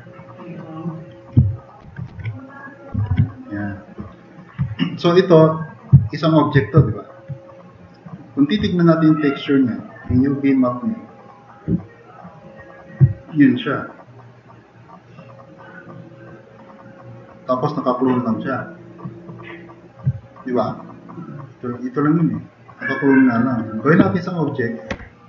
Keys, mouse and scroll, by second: 1.8 ctrl+c, 2.1 ctrl+c, 3.1 ctrl+v, 6.0 drag, 13.1 click, 24.9 ctrl+shift+e.